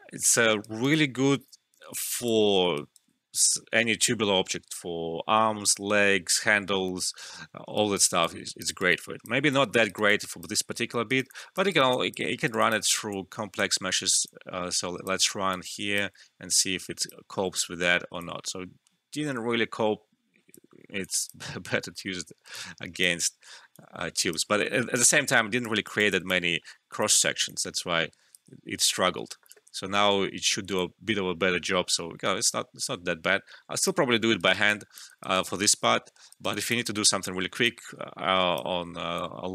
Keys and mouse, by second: 0.3 alt+middle click, 0.6 alt+right click, 0.9-2.3 alt+drag, 2.3 alt+middle click, 2.7 alt+right click, 7.6 alt+right click, 7.7 alt+right click, 8.2 alt+click, 8.6 alt+right click, 8.9 alt+click, 9.5 alt+middle click, 9.8 alt+right click, 10.0 alt+click, 11.0 alt+right click, 11.2 alt+click, 11.6 alt+right click, 11.8 alt+click, 12.2 alt+middle click, 12.4 alt+right click, 12.5-17.2 alt+drag, 17.2 Return, 18.1-20.7 alt+drag, 20.7 alt+middle click, 21.0 alt+click, 21.6 ctrl+z, 22.5 alt+click, 23.1 alt+right click, 23.7-25.8 drag, 25.8 alt+right click, 26.0 alt+click, 26.4 alt+middle click, 26.9-28.7 alt+drag, 28.7 Return, 30.7-34.0 alt+drag, 34.0 alt+middle click, 34.3 alt+right click, 34.6 alt+click, 35.1 alt+right click, 35.9 alt+middle click, 36.2 alt+right click, 36.4 alt+click, 37.6 alt+click, 38.7 alt+middle click, 39.1-39.5 alt+drag.